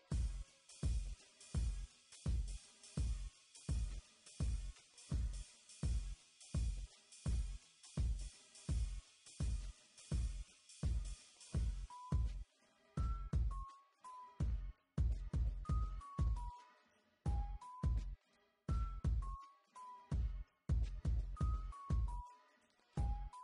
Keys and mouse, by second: 0.1 Tab, 1.1 KP_1, 1.4 e, 1.6 s, 1.8 e, 2.6 Tab, 3.0 KP_7, 5.7 KP_1, 6.0 s, 7.4 click, 7.6 KP_1, 12.4 Tab, 13.1 e, 13.8 Tab, 15.3 ctrl+r, 16.2 Tab, 16.3 Tab, 16.8 click, 16.9 b, 18.2 b, 19.0 middle click, 21.8 z, 23.1 ctrl+r.